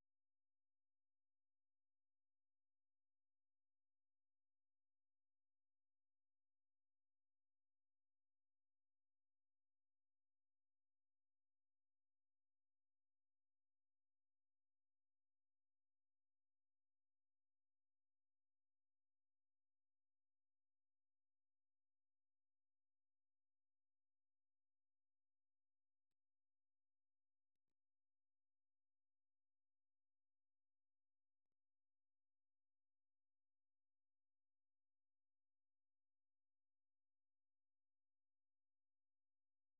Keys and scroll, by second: 11.8 ctrl+w, 27.3 alt+Tab, 30.7-35.0 typing, 39.3 ctrl+x, 39.5-39.7 typing.